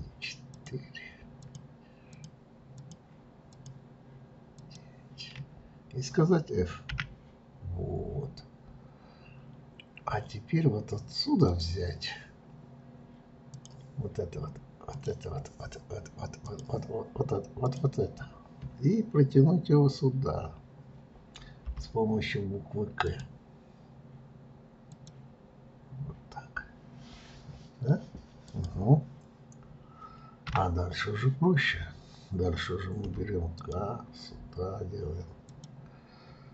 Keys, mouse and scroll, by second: 0.4 shift+click, 1.4 shift+click, 2.1 shift+click, 2.7 shift+click, 3.5 shift+click, 4.5 shift+click, 6.9 f, 11.4 click, 13.5 click, 14.9 click, 16.4 click, 17.7 click, 21.6 k.